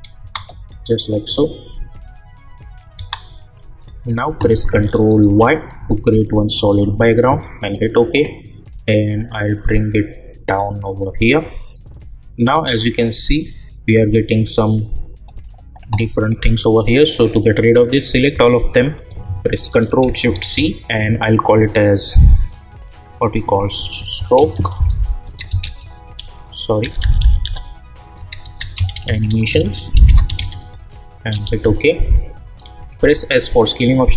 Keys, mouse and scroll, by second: 0.2 space, 2.9 space, 3.5 click, 5.2 ctrl+y, 7.6-13.3 drag, 17.9 click, 18.9 shift+click, 20.3 ctrl+shift+c, 23.5-26.1 typing, 27.9-30.8 typing, 31.3 Return, 33.0 s, 33.6-34.1 drag.